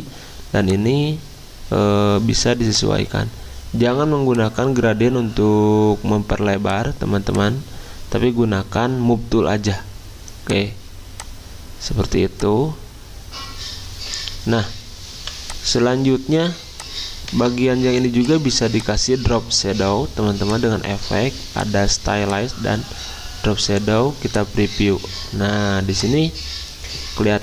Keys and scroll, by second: 15.1 v, 17.7 ctrl+alt+2.